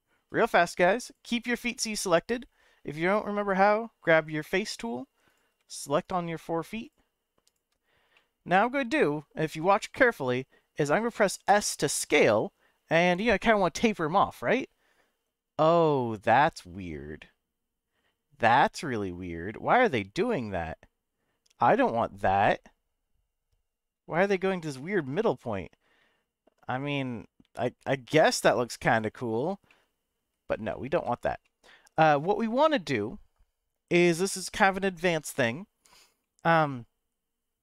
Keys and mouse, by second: 1.0 click, 1.6 middle click, 5.2 click, 6.0 shift+click, 6.8 shift+click, 7.5 shift+click, 8.3 middle click, 11.5 s, 28.8 click, 29.7 middle click, 30.9 ctrl+z, 31.4 middle click, 36.2 middle click.